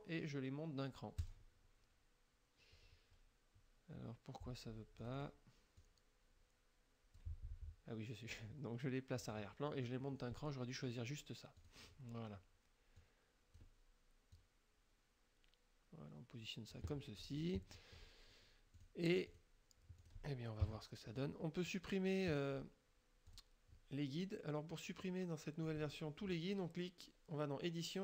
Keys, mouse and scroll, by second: 1.3 click, 5.0 click, 5.8-7.4 drag, 9.3 click, 11.6 click, 13.0 click, 14.4-17.0 drag, 17.3 click, 17.8 click, 18.8 click, 19.4 click, 20.1 click, 20.7 KP_5, 23.4 click.